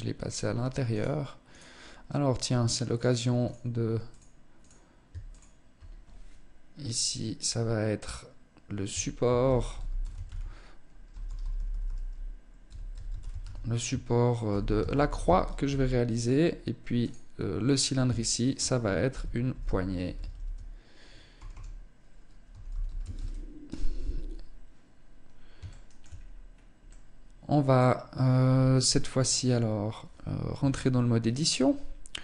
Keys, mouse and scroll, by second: 0.4 right click, 1.0 right click, 2.4 click, 2.9 click, 3.5 click, 4.0 click, 4.7 ctrl+click, 4.8 ctrl+click, 16.4 click, 17.7 ctrl+click, 25.2 shift+middle click, 25.6-26.1 scroll up 3, 26.3 middle click, 30.0 Tab.